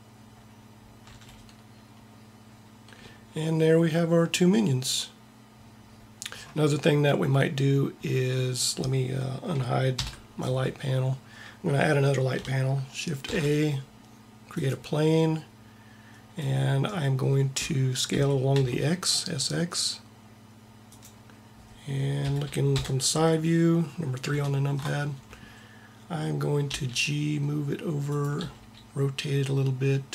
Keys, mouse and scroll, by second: 0.4 middle click, 1.0 a, 9.9 alt+h, 13.2 shift+a, 18.0 s, 22.1 KP_1, 22.7 KP_3, 26.5 g, 28.3 r.